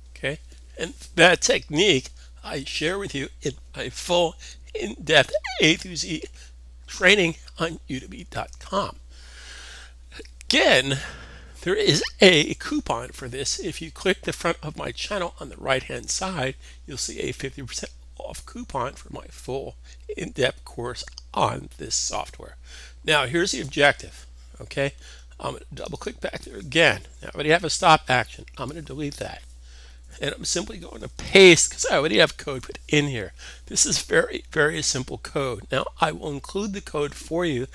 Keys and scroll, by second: 32.2 super+v.